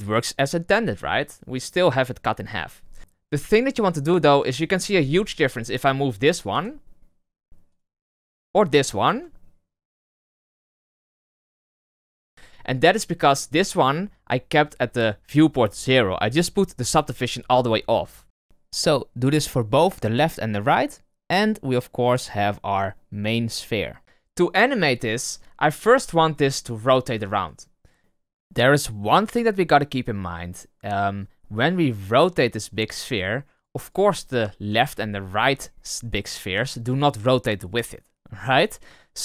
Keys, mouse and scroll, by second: 4.9 right click, 6.5 g, 7.9 right click, 9.0 g, 13.4 right click, 18.5 right click, 19.2 g, 21.2 click, 25.3 right click, 25.6 r, 28.0-31.0 middle drag, 32.5 click, 33.0 click, 33.5 click, 33.7 click, 34.3 right click, 34.6 r.